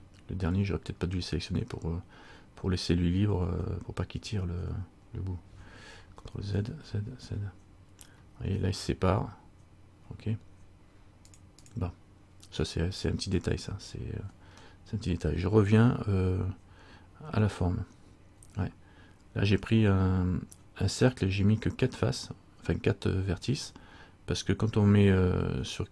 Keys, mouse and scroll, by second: 6.5 ctrl+z, 6.9 ctrl+z, 7.3 ctrl+z, 11.4 click, 11.8 click.